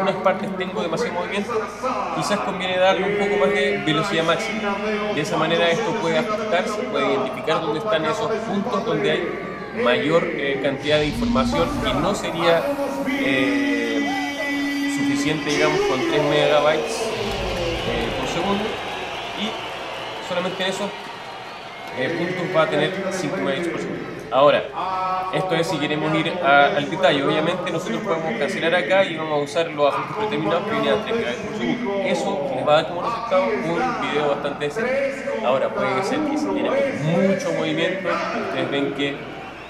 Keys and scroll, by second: 21.8 alt+super+-, 24.5 alt+super+-.